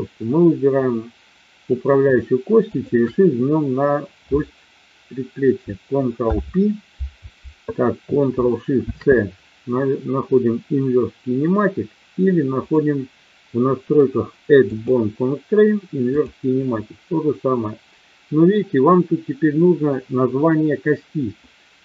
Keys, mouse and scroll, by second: 2.6-3.5 shift+drag, 6.1 ctrl+p, 12.5 click, 14.7-16.3 drag.